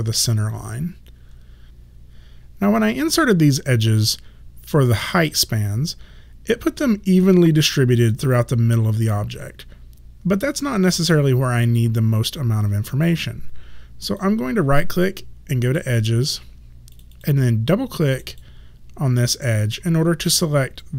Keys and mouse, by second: 14.2 right click, 17.0 click.